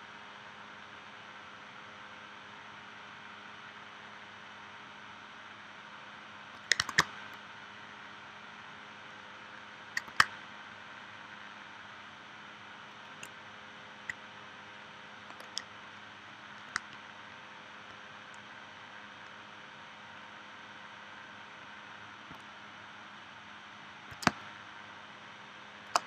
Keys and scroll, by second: 6.9 super+Tab, 10.1 super+Tab, 24.3 space.